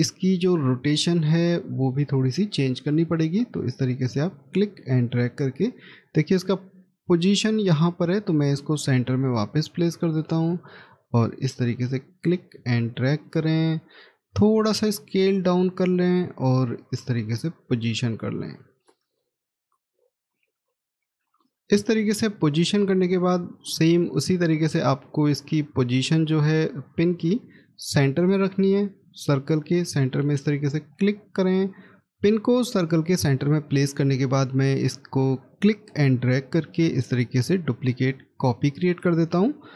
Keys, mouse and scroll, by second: 1.7 scroll up 1, 22.6 scroll down 1, 23.5 middle click, 24.2 scroll up 1, 38.7 right click.